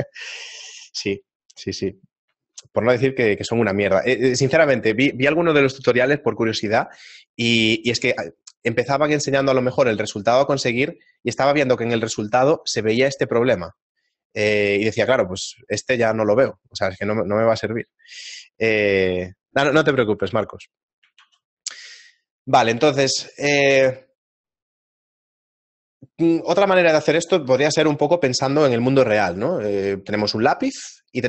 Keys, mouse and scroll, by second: 0.5 shift+middle click, 3.1 shift+middle click, 3.8 shift+middle click, 18.1 shift+middle click, 21.2 shift+a.